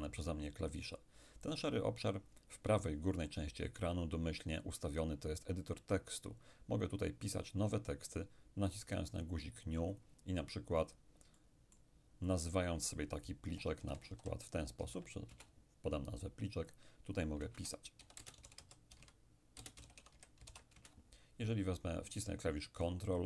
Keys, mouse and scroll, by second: 9.2-13.4 drag, 11.4-13.4 middle drag, 13.5-15.4 typing, 15.4 Return, 16.8 click, 17.5 Return, 18.2-20.5 typing, 20.8 Return.